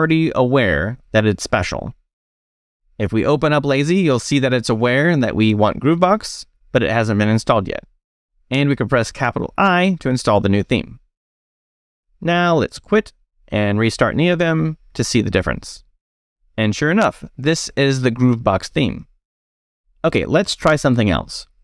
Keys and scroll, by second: 1.7 space, 3.2 l, 9.4 shift+i, 13.2 Escape, 13.3-14.5 typing, 14.7 Return, 19.7 space, 19.8 e, 21.1 e.